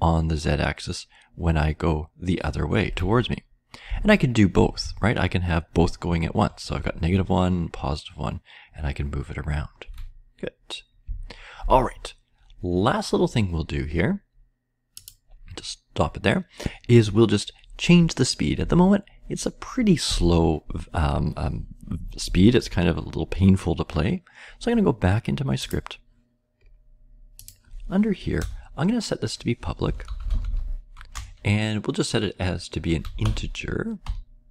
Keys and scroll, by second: 3.1 Down, 3.8-4.8 Left, 5.3-7.0 Up, 5.3 Left, 7.0-9.8 Right, 11.0 Down, 11.4 Down, 11.6 Down, 28.3 Return, 29.5-30.9 typing, 32.7-34.0 typing.